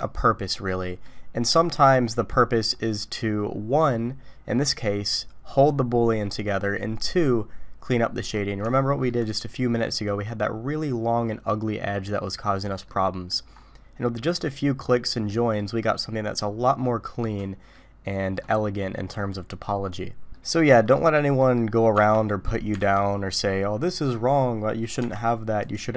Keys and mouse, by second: 0.7 middle click, 1.6 middle click, 8.1 middle click, 8.7 shift+middle click, 12.8 middle click, 15.3 click, 17.7 middle click, 20.4-20.9 middle drag, 21.4 middle click, 21.9 Tab, 22.8 alt+a, 25.0 Tab, 25.6 click.